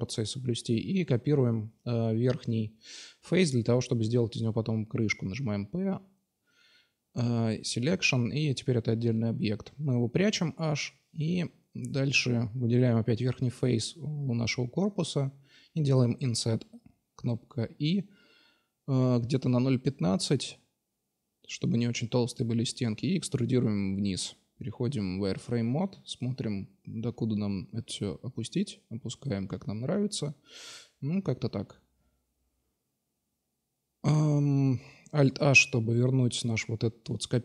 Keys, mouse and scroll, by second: 0.2-0.7 right drag, 0.9 shift+d, 1.6-2.2 drag, 6.3 p, 7.6 Tab, 8.1-9.9 drag, 8.6 h, 9.7 Tab, 10.3-10.7 drag, 11.6 i, 22.2 e, 23.8 z, 24.7-26.4 drag, 26.4 middle click, 27.1-28.1 drag, 30.7 Tab, 32.7-34.5 middle drag, 33.9 alt+h, 34.5-35.5 right drag, 37.1 h.